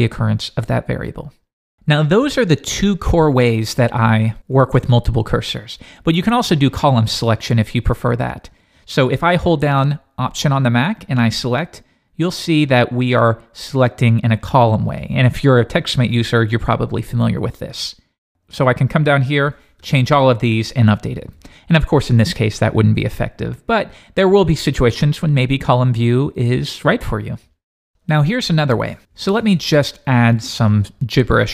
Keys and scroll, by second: 23.1 super+z.